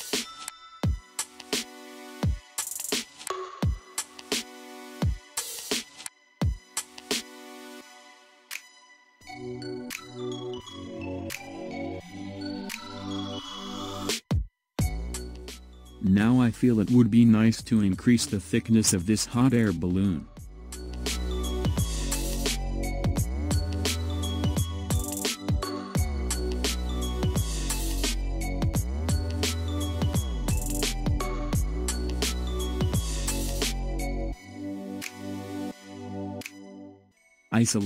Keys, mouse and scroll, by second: 3.4-4.8 ctrl+scroll down 1, 4.8-5.2 scroll down 2, 5.2-8.3 middle drag, 8.6 click, 10.2 Tab, 10.9 scroll down 1, 11.9 click, 12.8 scroll up 2, 13.4-16.4 middle drag, 17.9 click, 18.7-21.8 middle drag, 30.6 click, 32.9 click, 33.9-36.6 middle drag, 36.6-37.5 scroll down 2, 37.5 click.